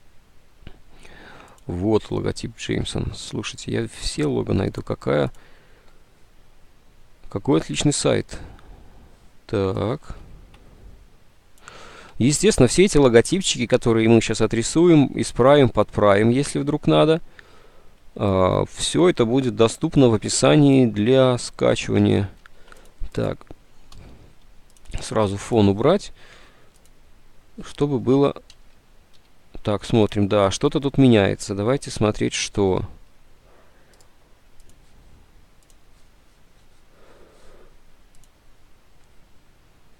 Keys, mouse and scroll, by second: 10.4 alt+Tab, 22.5 ctrl+u, 22.8 click, 24.0 Delete, 24.0 ctrl+u, 26.6 Delete, 29.3 ctrl+z.